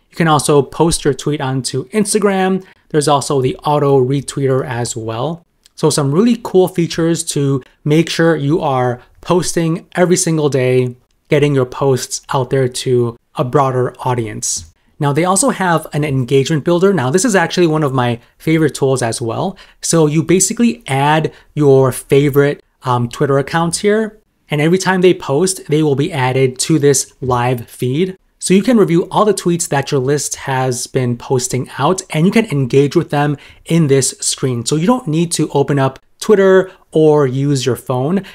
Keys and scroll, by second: 4.2 super+m.